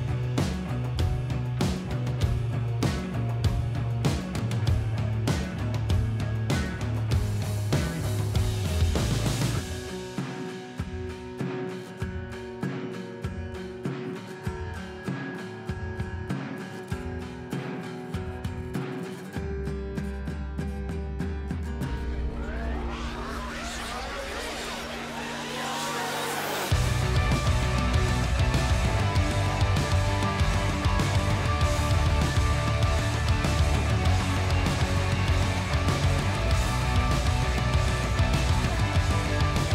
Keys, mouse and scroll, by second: 1.1 click, 1.3 g, 2.2 click, 3.5 a, 3.9 right click, 4.5-8.9 drag, 9.0 g, 10.3 click, 11.3 r, 12.7 click, 13.5 shift+click, 14.0 shift+click, 14.3 shift+g, 15.5 click, 17.0 r, 17.8 click, 18.2 g, 19.2 click, 20.3 g, 21.3 click, 21.7 e, 23.9 s, 25.8 click, 26.7 shift+click, 27.7 right click, 28.4 click, 31.4 s, 32.6 click, 32.8 g, 33.5-36.4 drag, 34.5 s, 36.1 g, 37.5 click, 38.1 shift+click, 38.6 shift+g, 39.2 click, 39.5 middle click.